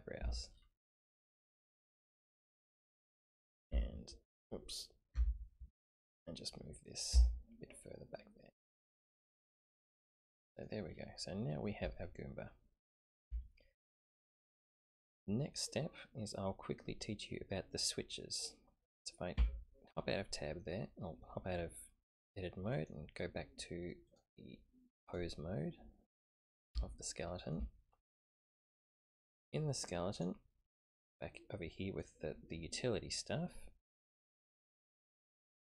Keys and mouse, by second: 0.5-3.0 middle drag, 3.7 KP_3, 5.1 KP_1, 7.1 g, 9.1-10.6 middle drag, 11.9-13.3 shift+middle drag, 19.3 Tab, 22.7 click, 24.1-25.1 drag, 26.9-27.6 shift+middle drag, 28.4-29.0 middle drag, 30.1 click, 32.0 click.